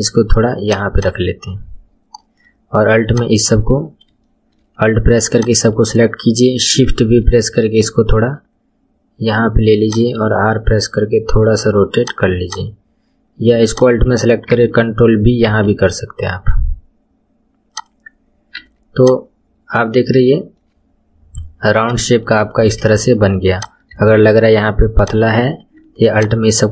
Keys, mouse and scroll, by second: 1.0 click, 2.0 scroll down 2, 3.1 shift+click, 3.8-4.2 scroll up 1, 4.2-5.3 shift+middle drag, 5.3 alt+click, 7.3 shift+v, 10.2 r, 12.4 click, 13.6 alt+click, 15.5 ctrl+b, 18.5 Tab, 19.0 click, 19.3-20.0 scroll down 8, 20.2-20.8 shift+middle drag, 20.8-21.4 scroll up 2, 21.4-22.0 scroll down 1, 22.0-22.5 shift+middle drag, 22.5 scroll up 1, 22.8 shift+middle click, 23.5 click, 23.9 Tab, 25.0 click, 25.3-26.1 scroll up 3, 26.1 alt+click.